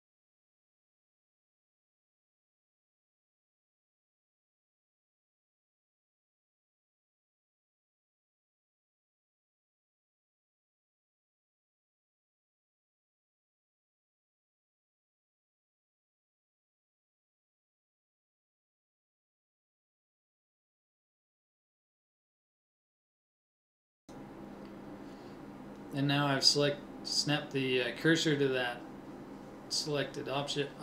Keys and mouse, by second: 5.3 ctrl+Tab, 7.5 a, 7.8 a, 8.0 b, 18.0 KP_1, 20.4 shift+s, 23.1 shift+a, 27.7-28.8 drag, 28.8 middle click.